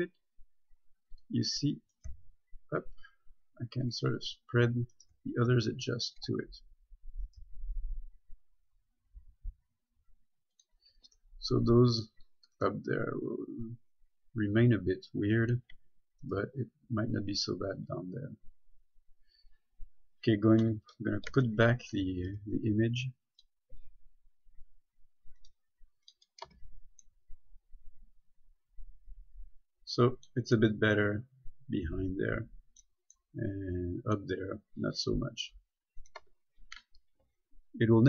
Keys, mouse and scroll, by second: 1.3 click, 2.1 right click, 2.3 g, 4.0 click, 4.1 click, 5.2 right click, 5.4 g, 6.3 click, 7.5 right click, 7.7 g, 10.8 click, 11.8 middle click, 12.8 right click, 13.1 g, 15.7 click, 16.6 right click, 18.0 click, 21.3-21.6 typing, 22.5 click, 24.4-24.8 scroll down 1, 25.6 click, 26.7 Tab, 27.3 middle click, 35.4-35.8 scroll down 1, 35.8 scroll up 1, 36.2 right click, 36.6 Tab, 37.4-37.9 scroll down 1, 37.9-38.0 scroll up 1.